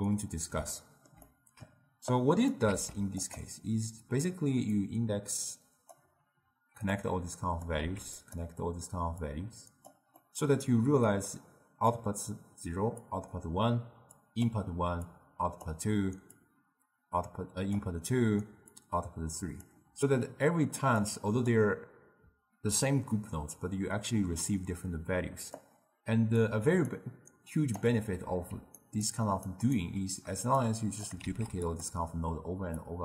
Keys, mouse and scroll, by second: 0.8-2.2 ctrl+middle drag, 2.2 click, 2.8 shift+d, 4.8 drag, 7.0 click, 7.9 shift+d, 9.3 drag, 10.2-11.1 middle drag, 11.1-16.2 typing, 11.4-12.0 drag, 13.1 click, 14.2 click, 15.2-15.7 drag, 16.4-17.8 drag, 17.8-18.7 d, 18.8-19.7 drag, 19.7 d, 21.1 click, 25.7-26.7 drag, 26.7 d, 27.0 right click, 27.9 d, 28.9 ctrl+right click, 29.5 ctrl+right click, 30.7 click, 31.3 shift+d, 32.9 click.